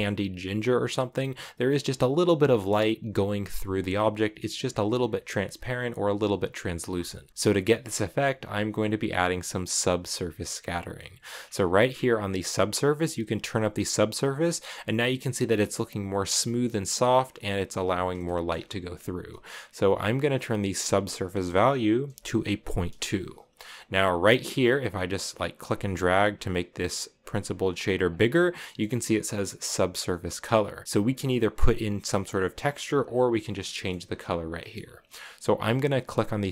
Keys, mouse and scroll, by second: 7.3-8.8 middle drag, 10.7 middle click, 11.0-12.6 scroll up 7, 12.6-15.9 drag, 17.4 scroll down 1, 17.9-18.3 shift+scroll up 4, 18.0 shift+middle drag, 20.5-23.5 drag, 25.6 click, 26.1-27.8 drag, 28.4-30.8 middle drag, 30.9-32.8 drag, 33.3 scroll down 2, 33.5 scroll up 1, 33.5-36.3 middle drag, 36.3 click.